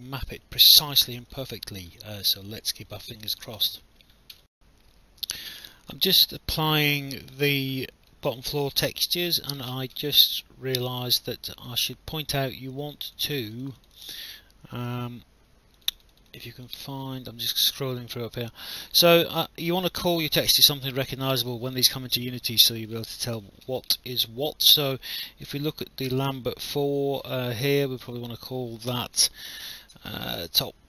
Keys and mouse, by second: 0.4 alt+click, 2.0 alt+click, 4.3 alt+F9, 5.8 alt+click, 6.4 alt+middle click, 6.9 alt+click, 7.4 alt+middle click, 9.0 click, 13.1 click, 15.8 click, 22.1 alt+middle click, 22.9 click, 28.0 click, 28.9-30.8 typing.